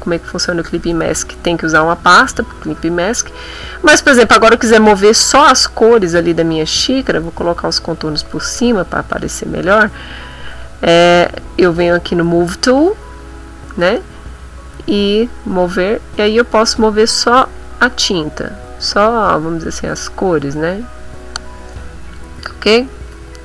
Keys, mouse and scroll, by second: 4.3 click, 5.1 click, 7.0 click, 8.0 click, 10.2 click, 11.8 click, 14.7-22.3 drag, 23.1 ctrl+z.